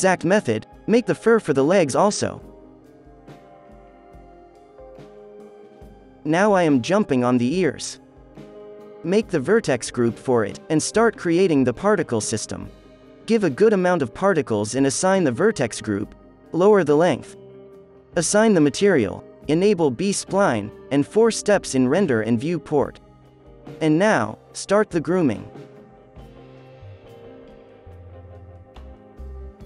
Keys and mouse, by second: 0.7 click, 1.9 ctrl+s, 2.2 middle click, 2.9 ctrl+s, 8.9 ctrl+l, 8.9 alt+h, 10.4 click, 10.7-14.3 drag, 11.9 ctrl+s, 13.2 KP_0, 13.8 z, 14.1 Tab, 14.2 middle click, 14.8-16.4 drag, 16.4-22.8 drag, 17.1 middle click, 19.8 KP_4, 23.1 f, 27.4-29.6 drag, 27.4-29.6 right drag.